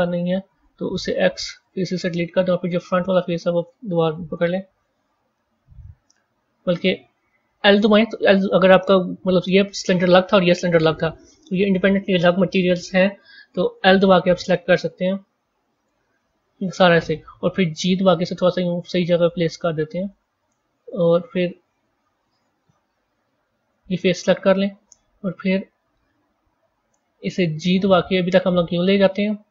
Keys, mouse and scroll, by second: 0.0 click, 1.0 x, 1.9-3.2 middle drag, 3.2 click, 4.1 KP_1, 4.6-5.2 scroll down 3, 21.6 click, 23.0 KP_1, 27.4 g.